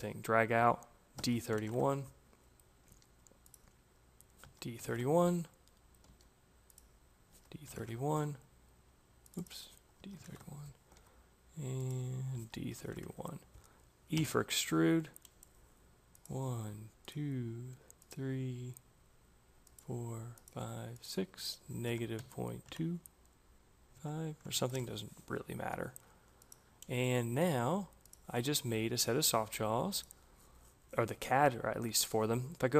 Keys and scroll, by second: 1.0 d, 1.4 1, 1.5 Return, 2.7 c, 4.3 d, 4.7 Return, 5.9 c, 7.0 d, 7.6 Return, 9.7 d, 10.1 Return, 10.8 c, 12.0-14.0 typing, 22.0 Delete, 22.5 2, 23.8 5, 24.3 Return.